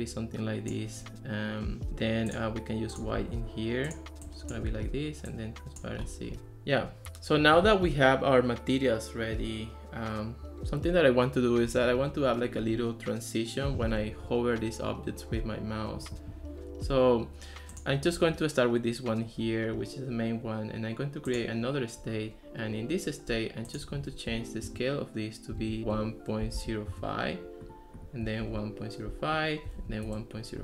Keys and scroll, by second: 24.7 Right, 25.6-27.1 typing, 28.4 super+v, 29.9 super+v, 30.1 Return.